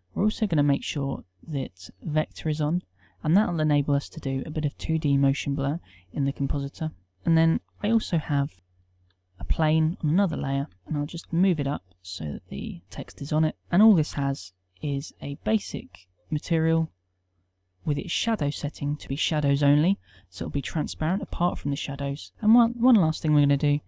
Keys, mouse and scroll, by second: 10.7 KP_1, 11.3 g, 14.0 g.